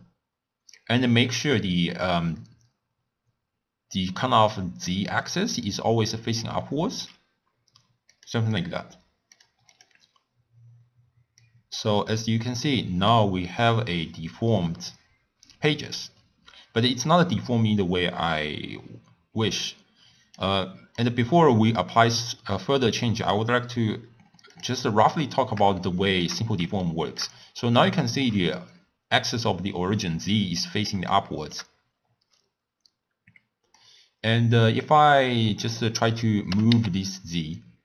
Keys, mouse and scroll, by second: 4.2-11.7 middle drag, 11.7-14.4 drag, 21.5-24.5 middle drag, 24.5-25.8 drag, 25.8-27.5 shift+middle drag, 27.5-28.0 scroll down 1, 28.0-36.5 shift+middle drag, 36.5 g.